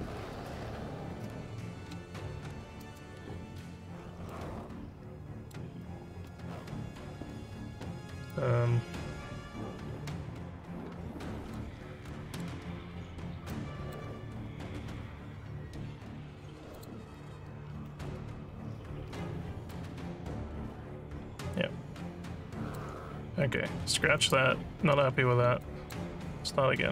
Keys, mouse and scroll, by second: 3.3 alt+scroll, 3.4 alt+scroll, 3.4 alt+scroll, 4.3-5.5 alt+middle drag, 8.3-11.5 alt+drag, 12.1 alt+middle click, 12.8 scroll, 13.5 alt+click, 16.7 click, 19.7-22.7 alt+drag, 24.2 click, 25.6 alt+click, 26.3 scroll down 2, 26.8 alt+middle click.